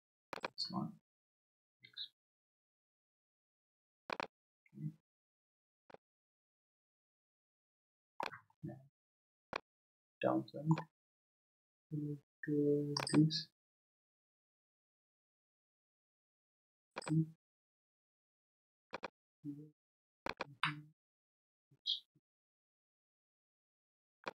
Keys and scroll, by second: 1.6 shift+e, 21.5 shift+e.